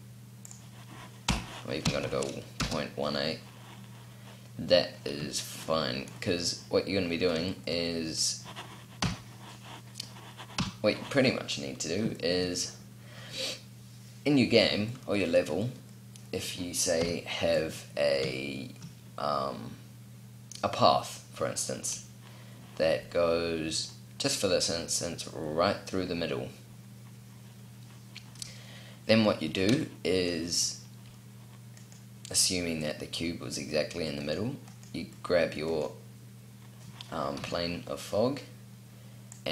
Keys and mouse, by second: 0.2-3.5 drag, 3.5 middle click, 8.7 KP_7, 10.3 KP_5, 16.7 KP_7, 37.1 KP_7.